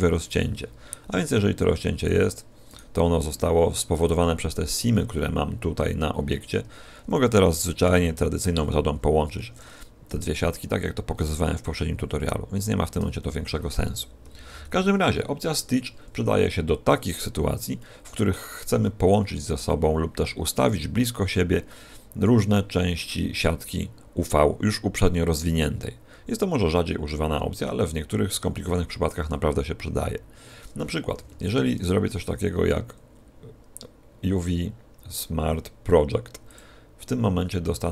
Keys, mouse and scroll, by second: 2.1 click, 2.6 right click, 7.8 p, 9.3 Escape, 10.0 a, 11.8-12.1 scroll down 4, 13.1 a, 14.4 alt+p, 15.5 a, 17.1-17.5 scroll down 3, 17.7 shift+middle click, 31.1 a, 31.3 a, 32.2 u.